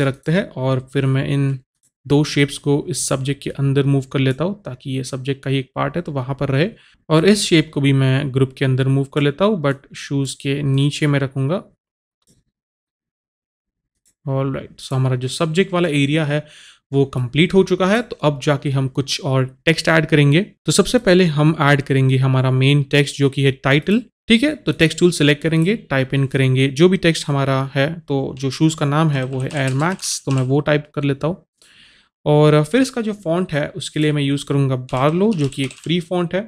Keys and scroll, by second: 29.1-30.8 typing, 35.0-35.8 typing.